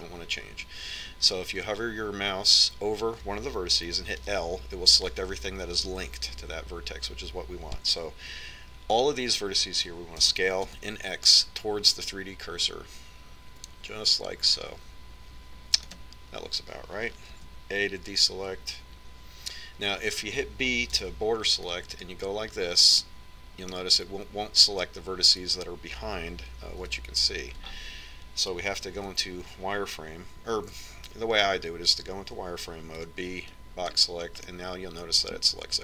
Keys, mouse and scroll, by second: 2.1 a, 5.8 l, 11.8 s, 19.0 a, 22.6 b, 24.7-26.4 middle drag, 28.5 KP_1, 30.7 z, 34.7 b.